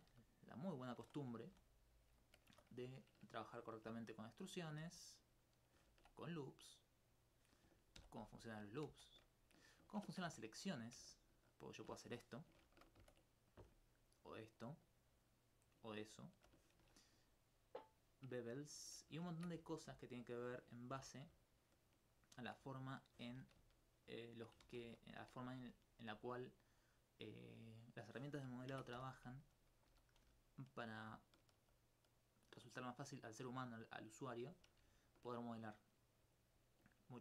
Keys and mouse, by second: 1.0 Tab, 2.2 alt+click, 2.5 alt+Tab, 4.3 right click, 4.5 shift+right click, 5.1 click, 6.5 click, 7.2 right click, 8.0 ctrl+x, 8.9 ctrl+z, 10.0 ctrl+Tab, 10.3 ctrl+2, 13.0 ctrl+Tab, 13.5 click, 13.9 alt+right click, 14.7 alt+click, 15.7 alt+click, 15.9 ctrl+alt+click, 19.3 ctrl+Tab, 19.6 ctrl+2, 20.1 alt+right click, 20.9 ctrl+b, 22.3 shift+click, 22.8 alt+click, 23.3 alt+click, 24.3 shift+right click, 24.7 ctrl+z, 26.3 middle click, 28.7 ctrl+Tab, 29.0 ctrl+2, 29.5 right click, 30.5 alt+click, 34.4 middle click, 36.4 alt+click.